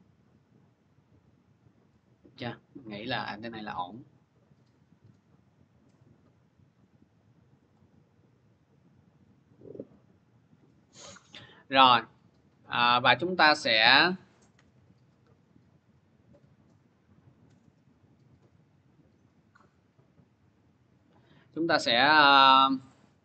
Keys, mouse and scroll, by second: 1.1-6.2 drag, 2.8 c, 3.3 c, 7.4-12.5 drag, 14.7-15.1 typing, 19.3 click, 20.9-21.8 typing, 22.7 click.